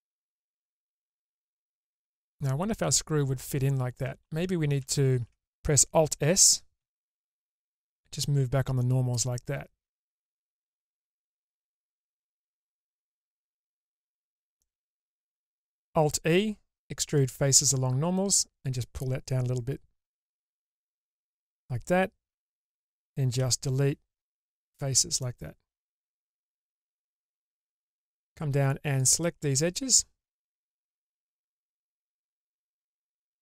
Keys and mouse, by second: 1.2-3.1 middle drag, 4.2 ctrl+z, 5.4 ctrl+z, 7.0 alt+s, 12.1-14.0 middle drag, 14.8 middle click, 15.8 alt+e, 23.5 Delete, 25.4-27.3 middle drag.